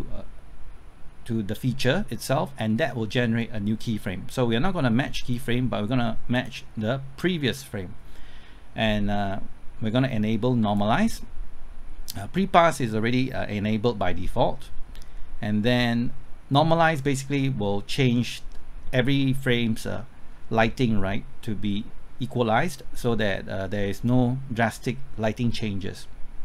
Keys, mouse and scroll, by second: 18.6 scroll up 1, 19.2 middle click.